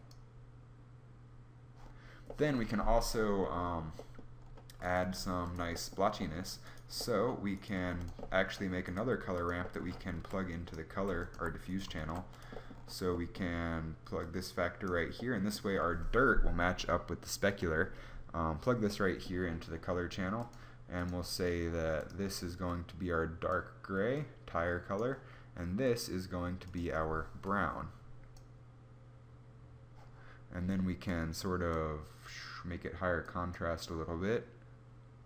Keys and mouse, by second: 4.8 g, 7.5 g, 8.6 right click, 9.7-11.9 typing.